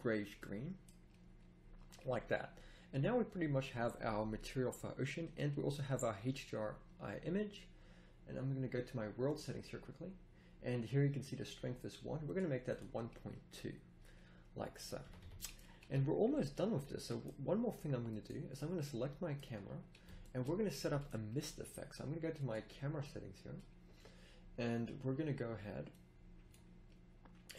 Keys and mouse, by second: 13.1-14.2 middle drag, 15.0 z, 15.2 z, 15.4-15.8 middle drag, 15.8 a, 19.8-21.2 middle drag, 25.9 middle click.